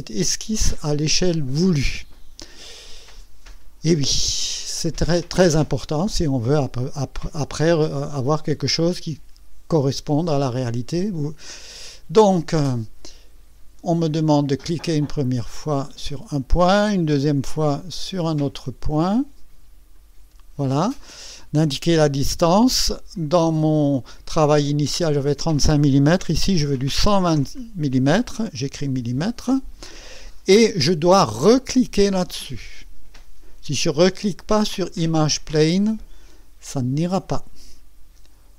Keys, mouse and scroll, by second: 11.5 click, 16.1 click, 19.9 click, 23.1-25.3 drag, 26.6 KP_1, 26.9 KP_2, 27.3 KP_0, 28.8 m, 37.0 click.